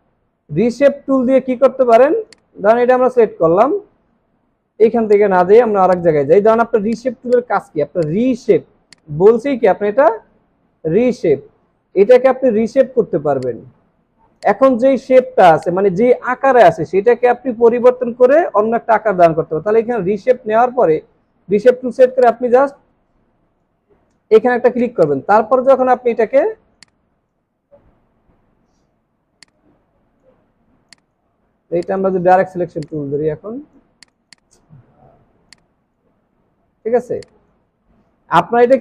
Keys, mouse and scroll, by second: 2.3 double click, 5.6 alt+scroll down 1, 7.1 space, 7.3 double click, 7.6 space, 13.5 right click, 15.5 space, 27.6 alt+scroll up 1, 30.5 alt+scroll down 1, 30.9 space, 34.2 double click, 36.8 alt+scroll down 1.